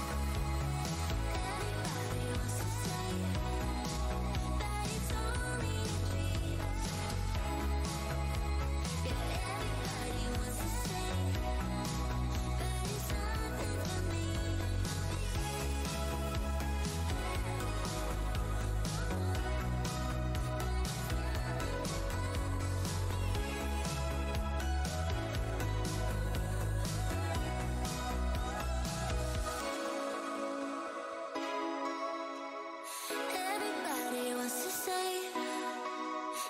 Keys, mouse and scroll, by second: 0.5 scroll down 1, 0.7-1.1 alt+scroll up 1, 1.3 Tab, 1.5 alt+click, 1.7-2.2 scroll up 1, 1.7 w, 2.2 Tab, 4.9 alt+click, 4.9 alt+Tab, 5.5 shift+right click, 5.6 shift+Tab, 6.7 click, 7.7 w, 8.0 scroll down 1, 12.5 scroll down 1, 13.2 w, 14.2 Tab, 14.2-15.0 scroll down 1, 15.0-15.9 scroll up 1, 15.9 Tab, 17.0 right click, 18.0 w, 19.0 right click, 19.2 Tab, 22.2 alt+click, 22.6 Tab, 22.9 alt+click, 23.1 w, 23.2 scroll up 1, 23.8 Tab, 25.3 alt+click, 25.9 click, 26.1 w, 27.2 click, 27.4 shift+Tab, 27.6 shift+right click, 28.0 alt+click, 28.3 z, 29.2 shift+Tab, 31.0 click, 33.6 right click, 34.2 Tab, 34.2 click, 34.5 alt+click, 35.0 Tab, 35.7 alt+Tab, 35.8 alt+click, 35.9 alt+Tab.